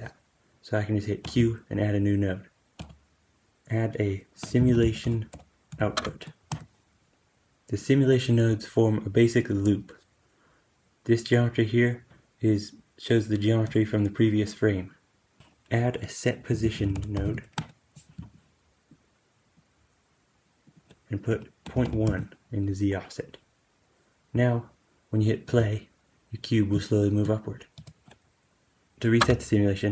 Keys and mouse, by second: 1.1 q, 7.0-18.2 drag, 15.4 q, 18.8-26.3 drag, 25.3 space, 27.6 space.